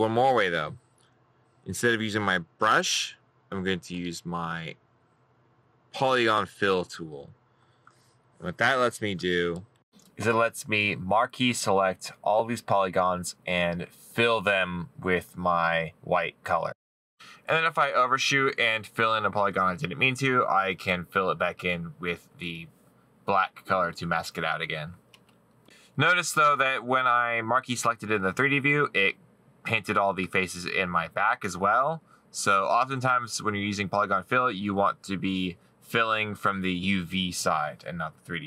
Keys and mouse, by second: 11.3 middle click, 12.7 middle click, 13.6 middle click, 21.6 middle click, 22.9 right click, 31.5 middle click, 32.9 right click, 35.3 right click, 36.6 middle click, 38.0 middle click.